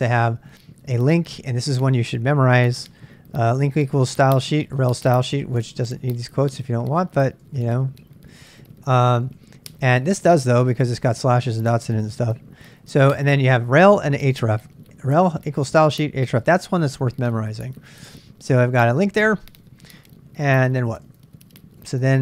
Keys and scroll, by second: 0.0-11.1 typing, 12.5 h, 12.8 h, 13.1 h, 13.5 h, 18.1 ctrl+[, 18.4-22.2 typing, 19.7 ctrl+[.